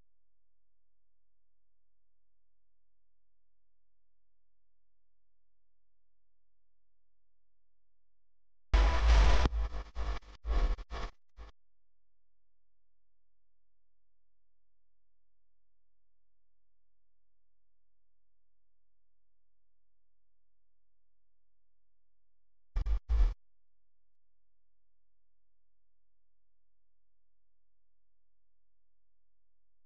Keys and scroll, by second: 3.9 space, 4.4 alt+super+space, 4.5 alt+super+space, 4.6 alt+super+space, 5.1-5.9 alt+super+space, 23.0 p, 24.0 v, 24.7 a.